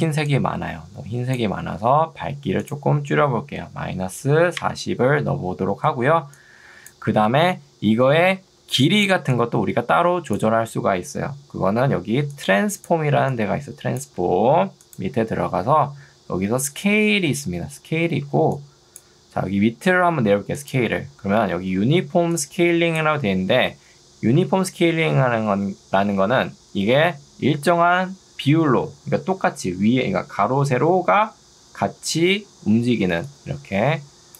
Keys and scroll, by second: 0.1 ctrl+2, 1.7 Escape, 4.1 0, 4.7 Return, 5.9 ctrl+2, 7.1 Escape, 8.5 ctrl+2, 14.3 Escape, 18.5 ctrl+2, 19.5 Escape, 21.7 2, 24.5 Escape.